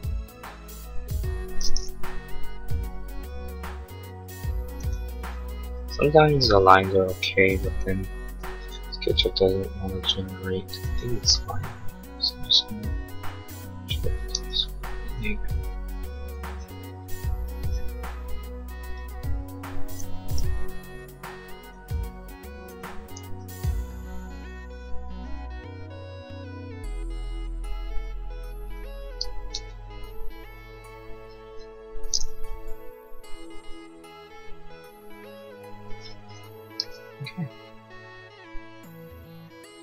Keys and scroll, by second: 7.7 Escape, 14.4 e, 20.4 l, 22.8 Escape, 29.6 e, 32.5 l, 35.9 e.